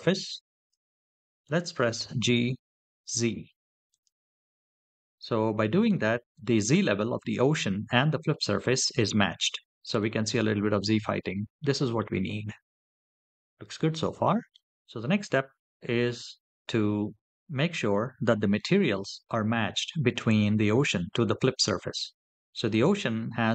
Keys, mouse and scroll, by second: 1.8 g, 2.8 z, 3.7 click, 8.4-9.8 middle drag, 11.4-11.8 middle drag, 12.2-12.9 scroll up 3, 12.9-13.3 scroll down 2, 13.6 middle click, 17.1 scroll up 2, 17.3 shift+middle click, 22.5 click.